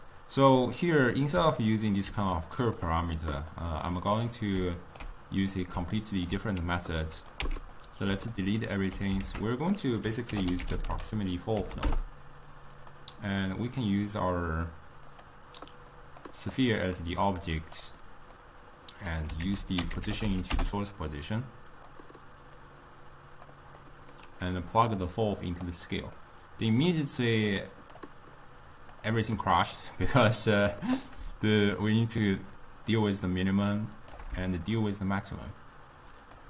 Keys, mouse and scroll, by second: 1.1-4.8 middle drag, 4.8 ctrl+right click, 5.6-6.8 middle drag, 6.8-7.5 drag, 7.5 x, 7.8-9.3 middle drag, 9.3 ctrl+a, 13.8 click, 16.0-16.6 middle drag, 16.6-18.1 drag, 18.1-19.5 middle drag, 19.5 ctrl+a, 22.7-23.8 drag, 23.8-24.9 middle drag, 24.9 drag, 26.2-27.6 middle drag, 27.6 drag, 28.5 click, 29.3-31.6 middle drag, 31.6-36.4 shift+drag.